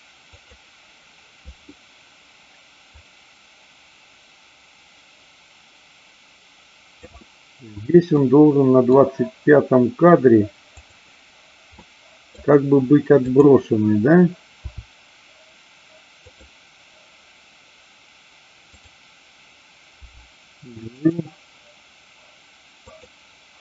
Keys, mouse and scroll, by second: 0.5 click, 2.9-6.9 drag, 8.1 middle click, 10.7 click, 11.7 middle click, 13.2-14.3 drag, 14.7 r, 16.2 click, 19.9 g, 21.1 click, 22.8-23.6 drag.